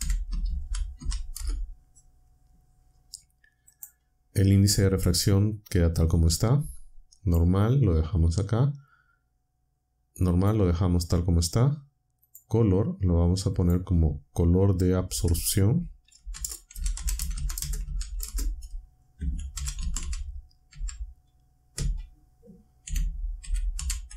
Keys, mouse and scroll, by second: 0.0-1.4 typing, 3.7 click, 7.2 click, 10.3 click, 12.2 click, 13.5 click, 15.0 space, 16.1-20.7 typing, 21.7 typing, 22.8-24.1 typing.